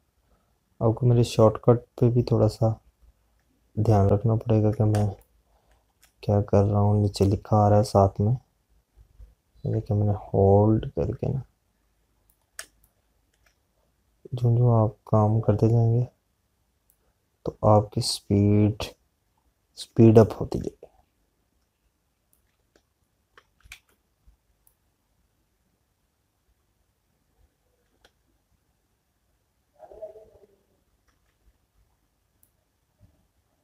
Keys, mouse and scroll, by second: 0.8 click, 7.7 space, 9.4 click, 14.5 space, 20.6 click, 22.7 space, 23.2 click, 33.5 alt+click.